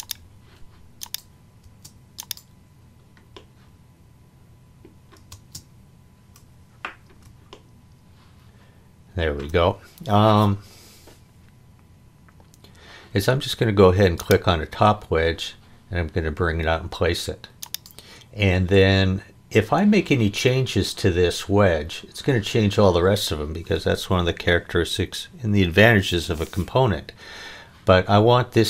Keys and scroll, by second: 1.6 space, 5.3 space.